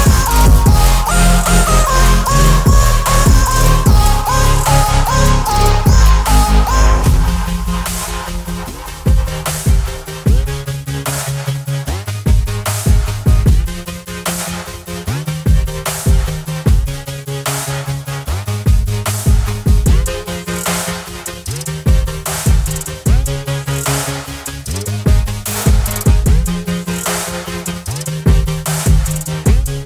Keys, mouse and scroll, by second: 0.9 Right, 1.0 ctrl+0, 3.0 shift+click, 4.4 ctrl+g, 7.2 ctrl+g, 7.3-9.8 shift+drag, 10.8-13.7 alt+drag, 14.9 ctrl+t, 15.9 right click, 17.4 click, 21.0-24.7 alt+drag, 26.0 ctrl+t, 27.6 right click, 28.3 click, 28.3 click.